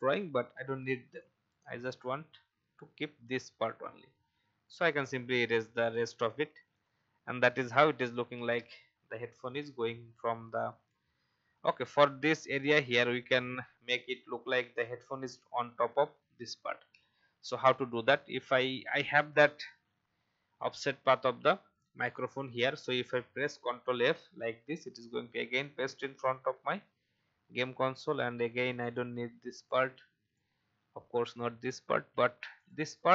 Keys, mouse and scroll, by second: 0.2 shift+e, 1.2 alt+click, 4.6 alt+click, 6.5 alt+v, 6.7 click, 7.3 alt+scroll up 1, 9.4-16.3 alt+scroll down 1, 16.5 alt+scroll up 1, 23.9 ctrl+f, 27.4 alt+scroll down 1, 28.2 shift+e, 28.9 alt+click, 30.3 alt+click, 32.2 alt+v, 32.5 click.